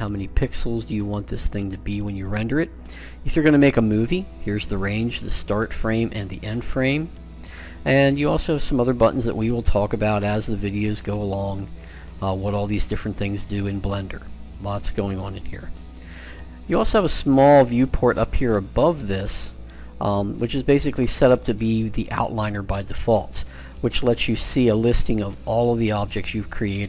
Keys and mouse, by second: 9.5-19.3 drag.